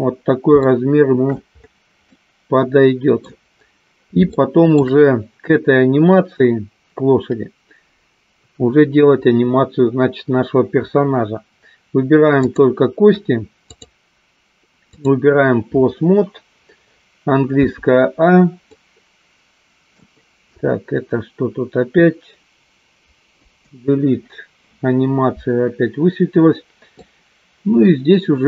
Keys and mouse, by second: 0.6 shift+middle click, 2.0-3.2 middle drag, 4.3 shift+middle click, 13.9-15.4 drag, 18.9-19.9 middle drag, 23.7 Delete, 27.0-28.4 middle drag.